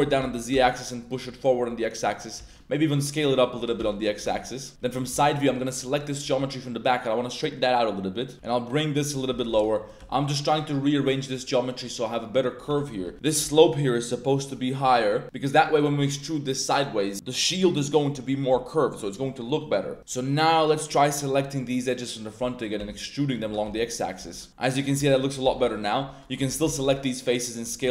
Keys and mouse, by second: 0.2 y, 0.5 x, 1.0 click, 1.3 middle click, 1.8 middle click, 2.3 s, 3.5-5.1 typing, 4.2 Tab, 4.3 middle click, 6.2 r, 8.3 g, 9.1 click, 9.3 a, 9.4 a, 9.9 g, 10.9 click, 12.6 a, 12.8 a, 13.0 b, 13.1 a, 20.0 right drag, 20.0 2, 20.2-20.7 middle drag, 21.1 ctrl+right click, 21.7-22.2 middle drag, 22.4 click, 22.7 e, 23.4 g, 23.6 x, 24.2 Tab, 24.2 click, 24.8 z, 25.0 z, 25.1 click, 25.4 3, 25.7 alt+click, 26.2 middle click, 26.5 z, 26.6 s, 26.8 z, 27.6 click.